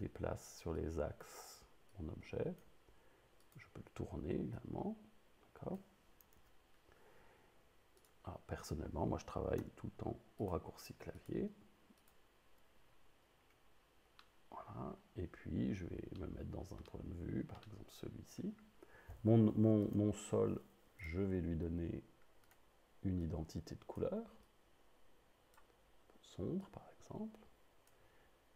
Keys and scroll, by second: 6.4 super+z, 9.6 s.